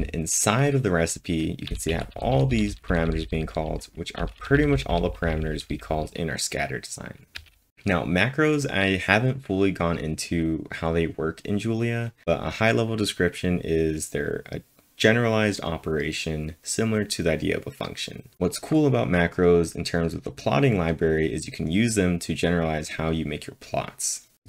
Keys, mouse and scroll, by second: 1.4-7.8 typing.